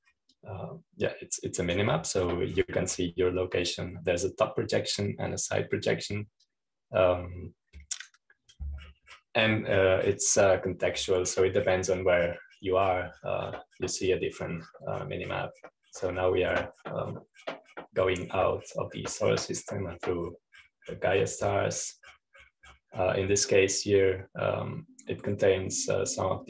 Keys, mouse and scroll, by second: 1.9-5.4 drag, 8.0-25.0 drag.